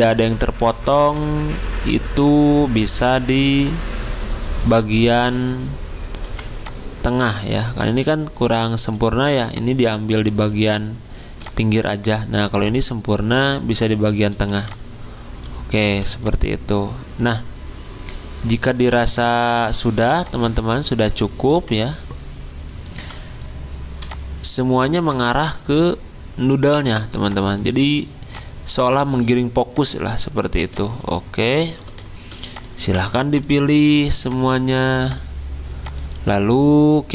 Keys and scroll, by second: 6.2 r, 7.6 v, 14.5 r, 15.8 v, 21.5 r, 22.9 v.